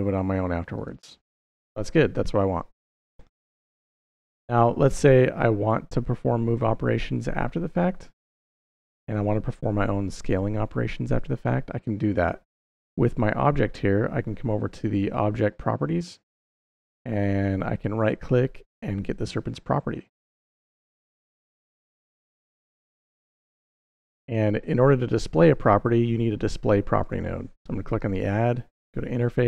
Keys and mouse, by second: 0.6 right click, 17.7-20.6 right drag, 21.3 click, 26.9-29.4 drag.